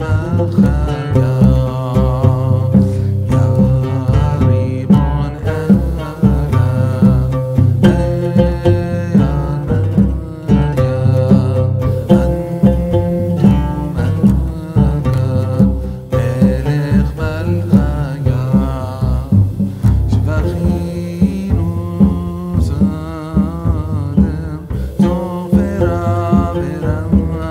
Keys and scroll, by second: 0.6 KP_0, 0.8 Tab, 1.4 e, 2.8 ctrl+z, 3.0 e, 3.7 KP_0, 12.8 KP_0, 13.8 Tab, 14.4 ctrl+b, 15.7 KP_0.